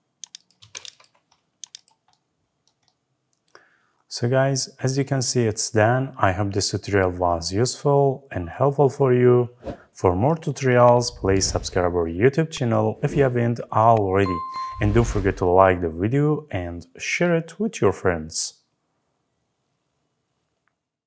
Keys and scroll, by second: 0.5 Escape.